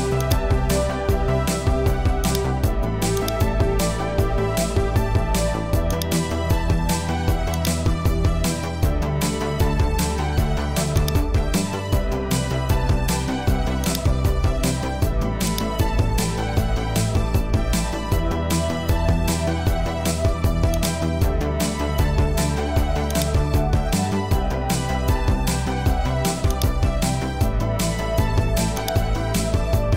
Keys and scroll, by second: 7.5-8.9 typing, 12.6 super+t, 17.6 Return.